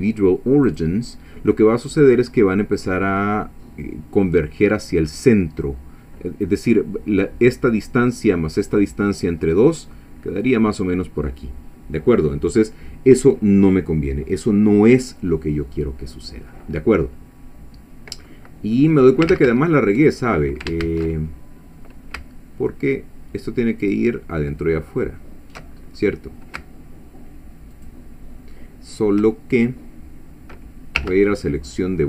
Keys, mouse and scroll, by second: 0.7 click, 15.2-18.5 middle drag, 18.8 middle click, 19.3 ctrl+z, 20.8 ctrl+shift+z, 21.3-21.8 ctrl+shift+scroll up 1, 23.8 alt+shift+click, 25.7-26.4 alt+shift+scroll up 3, 27.8 alt+shift+click, 31.0 2, 31.4 middle click.